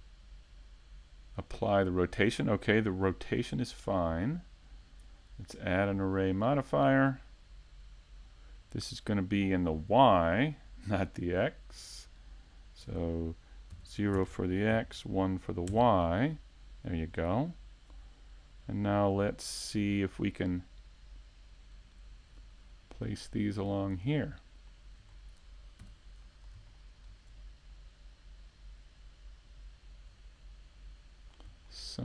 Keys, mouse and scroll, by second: 1.8 click, 4.4 click, 9.8 shift+middle click, 10.4 middle click, 12.0 s, 14.7 click, 16.2 KP_Decimal, 16.7 scroll down 2, 17.5 scroll down 5, 17.6 middle click, 18.1-18.7 scroll down 2, 18.7 middle click, 21.9 middle click, 24.1 click, 25.2 click, 26.7 middle click, 27.4-28.0 scroll down 7, 28.1 middle click, 29.1 right click, 29.6 shift+right click, 30.0 scroll up 1, 30.9 click, 31.8 scroll up 2.